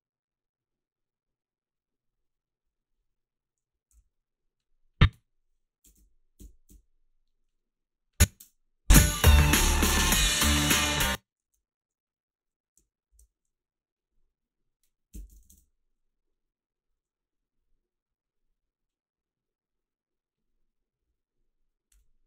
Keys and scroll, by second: 4.0 f, 5.9 Up, 6.4 Up, 6.7 Up, 8.4 space, 10.7 space, 11.5 ctrl+r, 13.1 alt+shift+s, 14.9-15.9 typing.